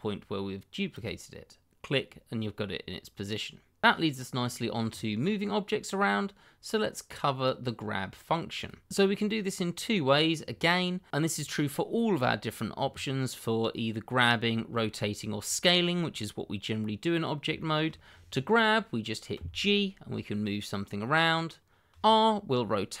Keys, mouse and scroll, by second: 1.6 click, 5.8 middle click, 8.5 click, 16.7-17.2 scroll up 1, 17.5 shift+middle click, 17.6 middle click, 17.7 shift+middle click, 19.3 g, 21.9 click, 22.5-23.0 scroll down 1.